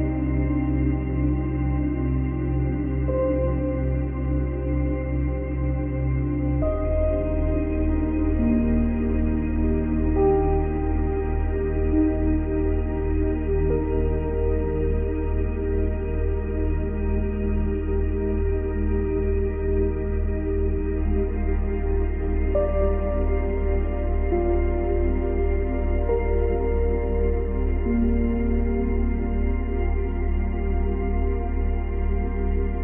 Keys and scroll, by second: 4.0 space, 5.6 space, 6.7 space, 10.2 space, 11.1 space, 11.4 ctrl+z, 13.5 Delete, 20.2 Delete, 23.8 Delete.